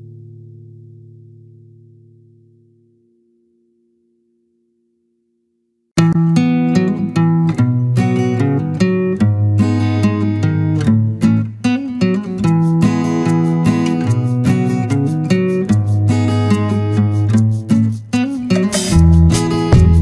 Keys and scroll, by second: 1.8 ctrl+-, 2.8 ctrl+space.